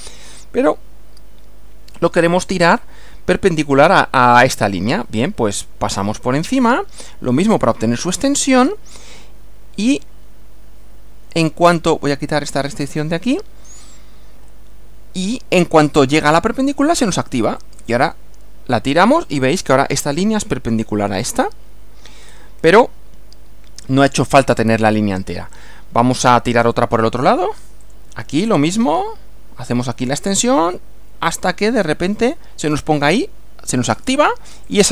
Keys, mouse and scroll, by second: 2.1 click, 12.6 click, 17.6 click, 19.3 click, 22.2 scroll up 1, 26.2 click, 27.8 click, 33.8 click, 34.7 click.